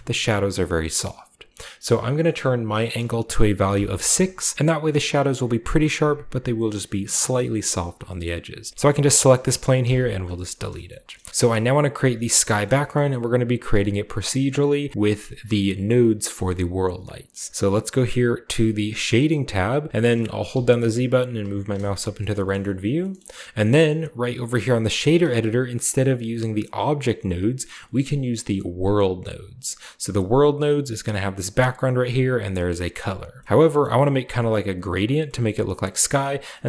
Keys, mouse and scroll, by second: 2.7 click, 3.7 6, 4.1 click, 4.5-7.6 scroll up 1, 7.6-8.0 scroll down 1, 8.0 shift+middle click, 8.7 ctrl+z, 8.7-9.8 scroll up 1, 8.7 x, 9.0-10.9 right drag, 9.8 x, 10.1 click, 10.6-11.3 scroll down 1, 10.9-11.3 shift+middle drag, 11.3 ctrl+b, 11.3-12.4 ctrl+drag, 12.6-13.1 shift+middle drag, 12.8-14.6 shift+scroll up 1, 13.7-15.2 shift+middle drag, 16.5-17.9 middle drag, 19.0 click, 19.8 scroll down 1, 20.5-21.2 z, 21.2-21.6 scroll down 1, 21.5 z, 22.0-24.5 scroll down 2, 23.9 shift+middle click, 23.9 typing, 25.8-27.8 drag, 28.8 click, 29.6 scroll down 2, 30.6 click, 31.2 click, 31.5-31.8 drag, 32.5 click, 33.1-33.4 scroll down 2, 33.4-35.3 shift+middle drag, 33.8-34.4 drag, 33.8-34.9 scroll down 1, 34.9-36.4 scroll up 1, 35.4 middle click, 35.8 middle click.